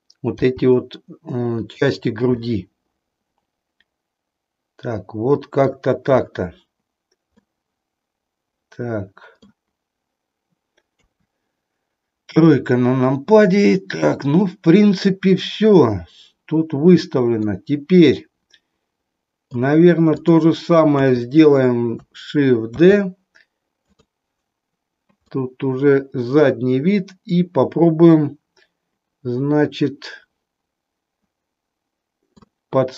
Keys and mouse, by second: 0.4 g, 1.6 click, 2.5-5.7 middle drag, 7.2-9.5 middle drag, 11.0 KP_3, 17.4-19.6 middle drag, 20.9 KP_3, 22.7 shift+d, 25.2-32.5 middle drag.